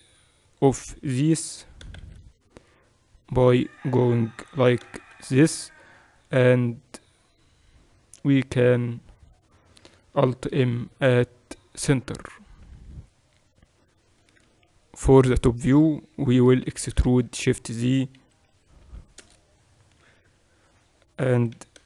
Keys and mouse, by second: 1.4 e, 10.5 alt+m, 12.7 a, 13.8-15.9 middle drag, 14.5 KP_1, 16.4 e, 20.1 KP_8, 21.3 e.